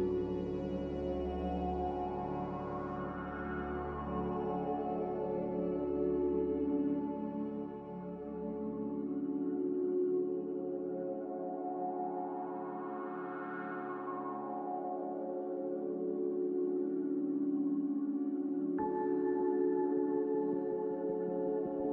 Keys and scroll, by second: 15.2 2, 15.4 0, 15.8 Return.